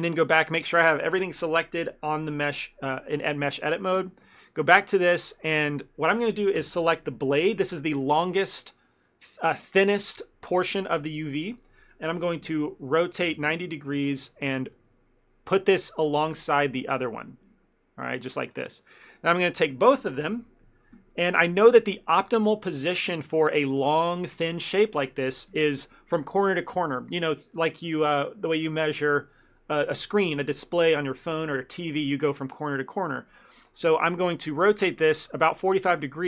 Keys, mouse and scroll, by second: 0.3 a.